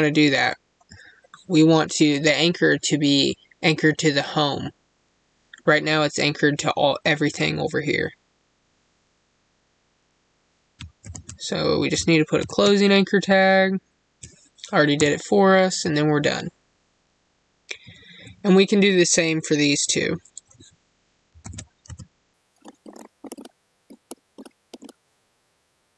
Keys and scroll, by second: 22.6 space.